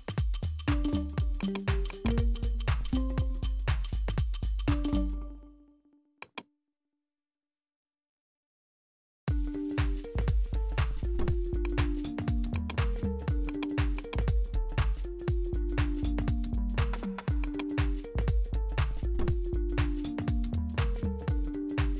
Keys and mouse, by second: 1.4-4.2 drag, 4.9-6.3 drag, 11.6-15.4 drag, 15.4 ctrl+z, 16.2 ctrl+z, 16.5 ctrl+z, 17.4-21.9 drag.